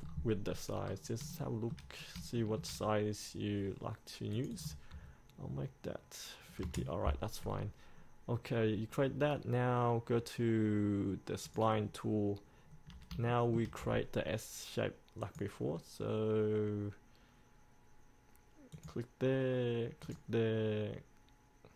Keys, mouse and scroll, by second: 0.2 scroll up 1, 1.0-1.4 scroll down 1, 1.6 shift+middle click, 2.5 shift+middle click, 4.5 click, 7.6 scroll down 1, 11.6 click, 12.8-13.2 scroll down 1, 13.4 shift+middle click, 15.4-20.0 drag.